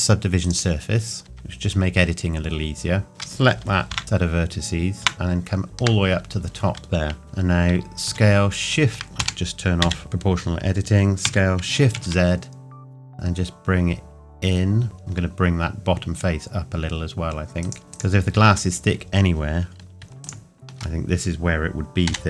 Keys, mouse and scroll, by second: 0.4 click, 1.2 Tab, 3.1 alt+click, 3.9 ctrl+KP_Add, 7.2-8.0 scroll down 1, 8.0 s, 9.2 Escape, 11.2 s, 11.9 shift+z, 17.6 click, 17.8 scroll up 1, 17.9 alt+click, 22.0 g.